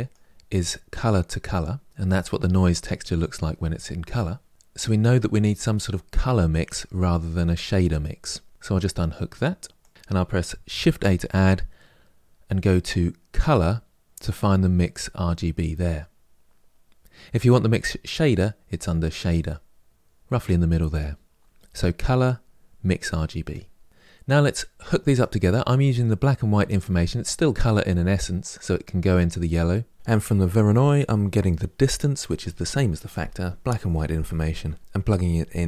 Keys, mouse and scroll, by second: 30.1 click.